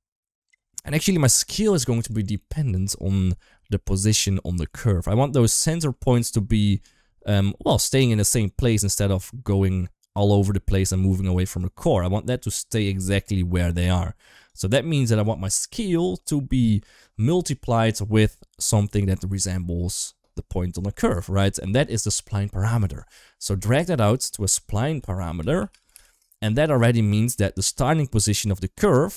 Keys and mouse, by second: 0.7 shift+middle click, 2.8-3.2 middle drag, 3.5 shift+middle click, 4.5 shift+middle click, 5.6 middle click, 7.9-11.5 drag, 11.9 middle drag, 12.6 shift+middle drag, 12.8 middle click, 13.6 shift+click, 14.5 shift+middle click, 24.2-26.9 drag, 27.5 g, 28.5 shift+middle click, 28.9-29.1 middle drag.